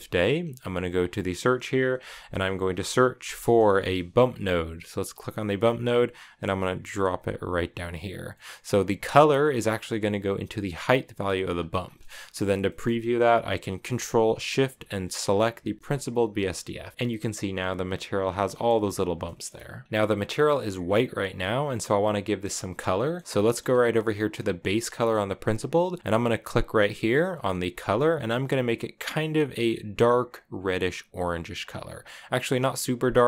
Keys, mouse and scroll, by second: 2.4 BackSpace, 7.5 click, 8.1-10.3 middle drag, 10.3-11.6 drag, 11.6 scroll down 3, 11.6 scroll up 1, 11.7-15.0 middle drag, 15.0 ctrl+shift+click, 16.1 shift+middle click, 18.0 scroll down 4, 18.2-18.9 shift+middle drag, 18.9 shift+scroll up 1, 19.0 shift+middle click, 19.8-20.8 scroll down 2, 20.8 click, 21.4-23.0 middle drag, 23.0-23.8 scroll up 4, 23.1 middle click, 23.8-26.2 middle drag, 26.2 click.